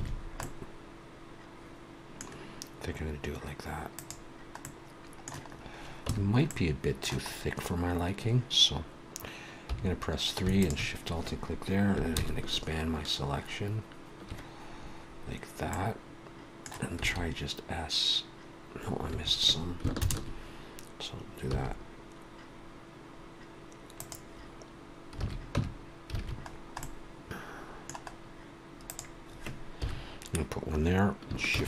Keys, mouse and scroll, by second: 0.1-2.1 scroll down 3, 0.4 middle click, 2.3 scroll down 1, 3.9 click, 4.6 middle click, 5.5-6.0 scroll up 2, 6.0 Tab, 6.4 middle click, 7.3 scroll up 1, 9.6 3, 10.5 alt+shift+click, 12.1 ctrl+KP_Add, 15.7 middle click, 17.0 s, 20.2 ctrl+KP_Add, 21.4 s, 25.3 alt+a, 25.5 Tab, 26.1 alt+a, 26.5-26.8 scroll down 2, 26.8 middle click, 28.1-28.4 scroll down 1, 28.8 click, 29.6 KP_1, 31.5 shift+d.